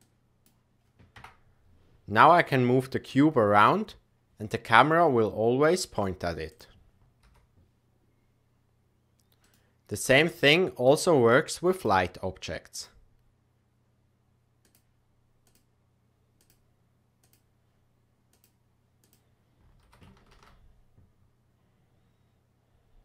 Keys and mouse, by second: 0.1 click, 1.1 KP_0, 2.3 click, 3.3 g, 7.2 g, 12.7 click, 15.4-16.4 drag, 17.2 click, 19.8 g.